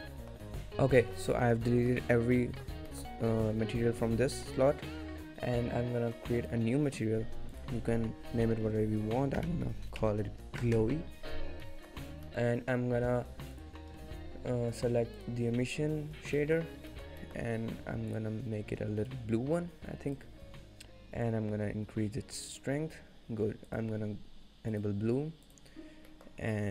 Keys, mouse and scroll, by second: 0.0 middle click, 1.3 scroll down 1, 1.5 shift+middle click, 1.8 middle click, 2.3 scroll down 1, 2.4 middle click, 3.0 shift+middle click, 6.5 click, 7.6 click, 11.7 middle click, 12.1 scroll up 1, 12.3 shift+middle click, 12.9 scroll down 1, 13.6 click, 13.6 scroll down 3, 16.5 middle click, 16.7 scroll up 2, 17.0 shift+middle click, 17.3 middle click, 17.4 shift+middle click, 18.2 click, 21.5 click, 23.7 click, 25.7 click, 25.9-26.3 scroll down 2, 26.2 middle click, 26.6 middle click.